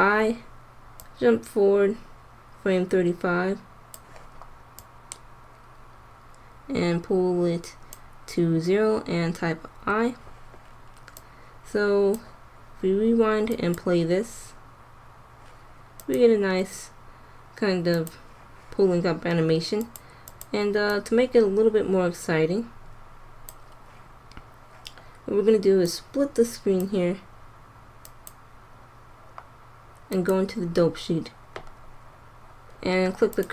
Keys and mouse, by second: 1.0-2.7 drag, 4.7-6.4 drag, 9.6 i, 11.1-12.9 drag, 13.4-14.6 drag, 16.0 click, 26.6-28.0 drag, 27.6 middle click, 31.7 click, 33.3 click.